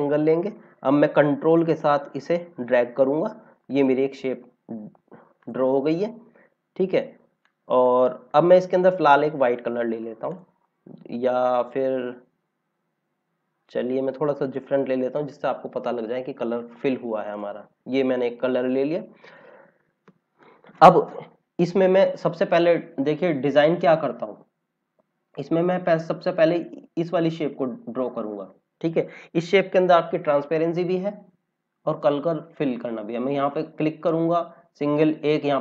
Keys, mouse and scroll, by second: 2.1 click, 4.4-5.3 scroll down 1, 5.3 click, 5.7-6.5 scroll down 1, 7.4 click, 10.2 click, 14.3 click, 17.3 click, 28.9 click.